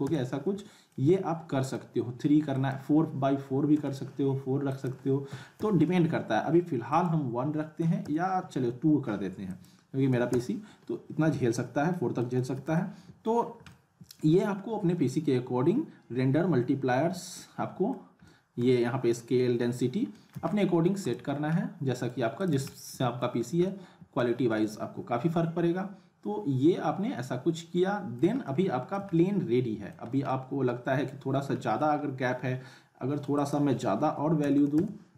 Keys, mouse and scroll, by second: 0.9-1.8 alt+middle drag, 2.5 click, 6.9 click, 9.5 click, 11.9 middle click, 12.4 z, 12.7-13.3 alt+middle click, 13.4 scroll up 2, 13.7-14.3 alt+middle click, 14.3-14.9 scroll up 1, 17.1 scroll up 1, 17.4-18.0 alt+middle drag, 20.3 z, 20.5-21.3 alt+middle click, 21.0 click, 21.3 scroll up 1, 21.6-22.1 alt+middle click, 22.4 click, 22.5 z, 22.7-23.3 middle click, 23.4 scroll up 1, 23.7-24.2 alt+middle click, 24.4 scroll up 2, 24.6-28.3 alt+middle drag, 30.1 scroll down 1, 30.3-31.2 alt+middle click, 31.3 scroll down 1, 31.6 middle click, 32.0-32.3 scroll up 1, 33.4 click.